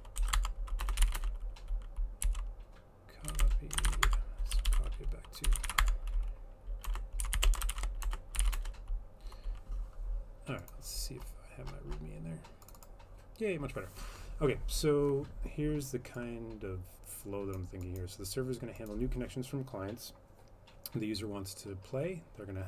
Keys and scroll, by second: 0.0-8.9 typing, 6.9 Return.